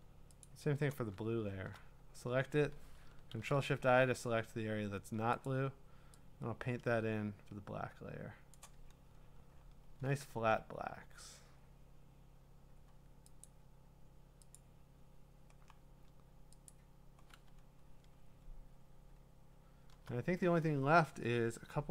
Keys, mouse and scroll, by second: 0.4-0.9 ctrl+click, 1.2 scroll, 3.3 ctrl+shift+i, 5.4 click, 7.3 click, 8.8-9.9 scroll, 10.4 ctrl+d, 11.6-12.3 scroll, 12.6 scroll down 5, 13.4 click, 14.7 click, 14.9 scroll, 15.7-16.4 scroll, 16.7 click, 17.7 scroll, 18.0 scroll down 7, 18.2-19.5 scroll up 11, 19.5 scroll up 1, 19.6-21.1 scroll, 21.4 scroll down 6.